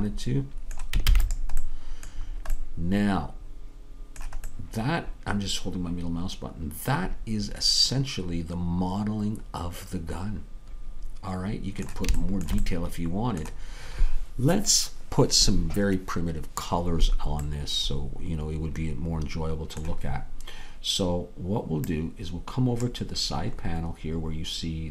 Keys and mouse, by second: 1.1 ctrl+s, 22.3-24.6 drag.